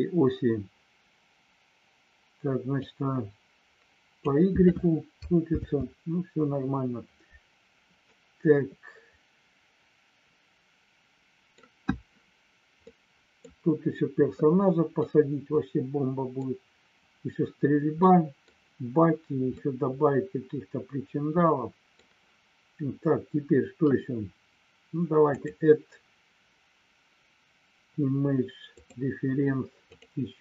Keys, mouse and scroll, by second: 2.8-4.2 drag, 5.7 ctrl+z, 8.0-11.4 middle drag, 12.9 middle click, 15.2-16.4 middle drag, 17.9 middle click, 19.7-21.9 middle drag, 25.3-29.0 drag.